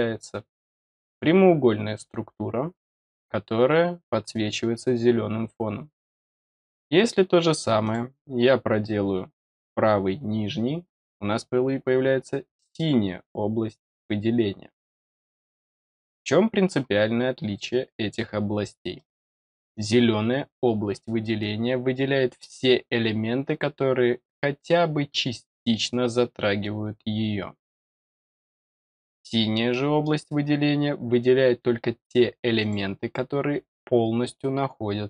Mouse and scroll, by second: 7.8 click, 17.6-18.1 middle drag, 18.9 middle drag, 19.7 click, 22.9 middle click, 28.9 click, 29.6-30.0 middle drag, 32.5 click.